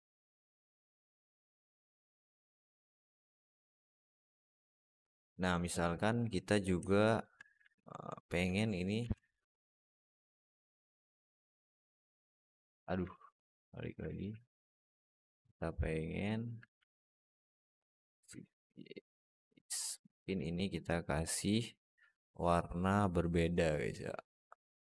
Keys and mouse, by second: 2.1-2.6 middle drag, 3.8-4.3 middle drag, 5.1 middle drag, 5.8 right click, 7.0 shift+right click, 7.6-8.1 middle drag, 11.4-11.8 alt+middle drag, 12.2 alt+shift+middle click, 13.9 alt+middle click, 14.6 shift+middle click, 16.6 alt+middle drag, 17.8 shift+d, 20.1 click.